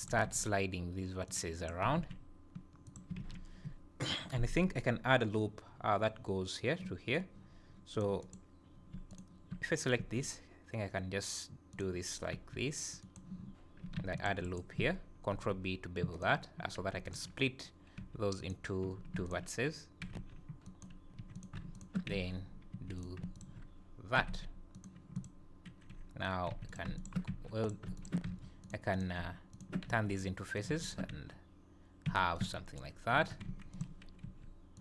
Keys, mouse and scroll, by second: 0.0 click, 0.1 g, 1.6 click, 1.8 g, 3.2 alt+a, 8.0 click, 8.6 click, 9.1 shift+click, 9.9 e, 12.3 r, 13.9 ctrl+e, 15.4 ctrl+b, 17.1 alt+click, 18.0 g, 19.3 alt+click, 20.1 g, 21.2 z, 21.4 click, 21.8 shift+click, 22.1 f, 22.8 j, 23.0 click, 23.4 shift+click, 24.2 g, 25.2 click, 26.5 z, 26.7 click, 27.0 shift+click, 27.3 r, 27.6 click, 28.0 shift+click, 28.3 f, 28.6 click, 29.3 click, 29.5 shift+click, 29.9 f, 30.0 click, 30.6 click, 30.8 shift+click, 32.1 f, 32.4 Tab, 33.2 Tab, 33.5 1, 33.7 click, 34.0 Tab, 34.2 g.